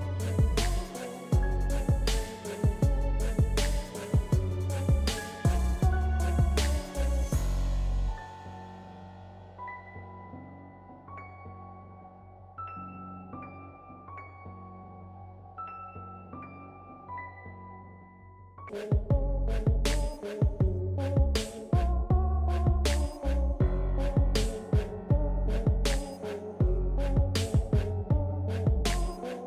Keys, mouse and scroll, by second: 6.1 ctrl+scroll down 1, 8.0-9.5 drag, 13.4 click, 13.4 typing, 14.9 click, 14.9 typing.